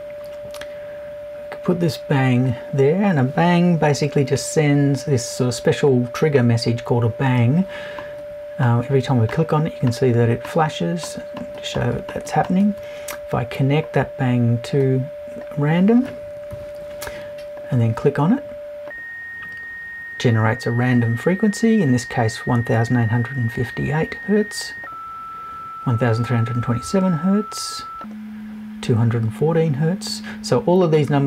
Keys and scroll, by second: 16.5 Left.